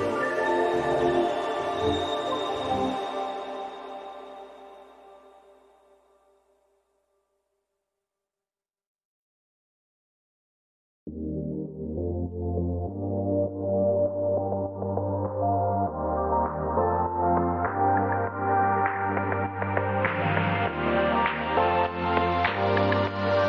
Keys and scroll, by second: 2.9 Up, 3.7 Up, 3.7 Down.